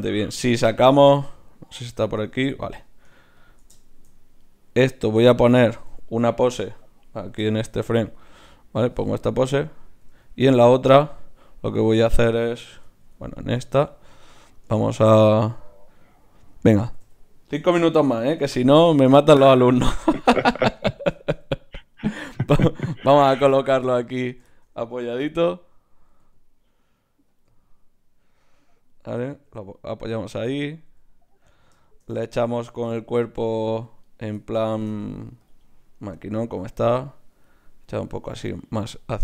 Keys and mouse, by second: 0.9-5.2 drag, 3.9-5.2 middle drag, 4.4 right click, 5.2 Tab, 5.4 click, 5.7 a, 5.9 a, 7.4 i, 10.2 Left, 12.8 Right, 16.9 a, 17.0 a, 18.4 alt+g, 18.8 alt+r, 20.4-21.6 drag, 23.6 middle click, 24.2-26.1 right drag, 26.1 g, 27.4 click, 27.5 middle click, 29.5 g, 30.5 middle click, 30.9 g, 32.6-37.5 middle drag, 35.4-39.2 drag, 35.4-37.5 right drag.